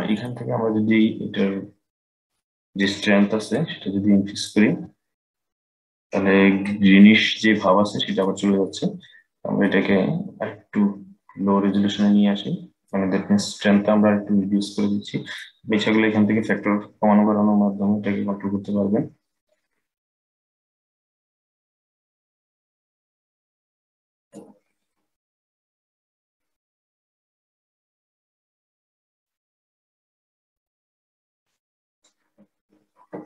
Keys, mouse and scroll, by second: 0.0-3.1 drag, 3.2 click, 9.4-12.5 drag, 15.1-18.2 drag, 25.9-32.0 drag.